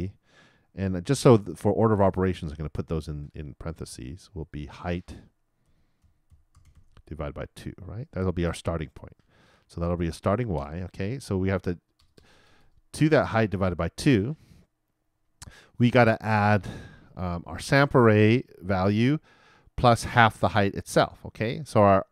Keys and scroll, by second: 2.2-3.0 typing.